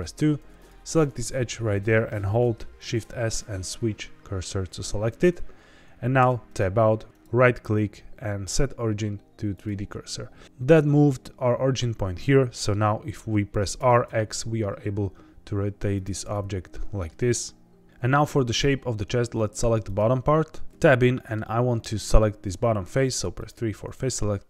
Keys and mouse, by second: 0.5 click, 2.7 shift+s, 6.1 Tab, 6.5 right click, 7.1-9.6 right drag, 12.2-12.7 middle drag, 13.7 r, 14.0 x, 15.9 click, 16.2-17.0 middle drag, 20.7 Tab, 20.9 middle click, 21.5 3.